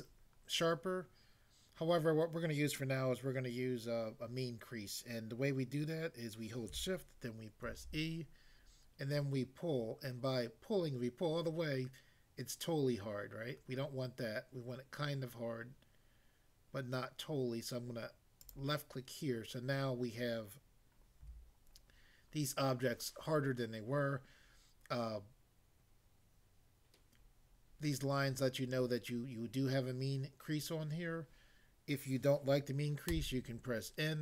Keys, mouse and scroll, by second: 7.7 e, 18.4 click, 21.3 a, 33.2 n.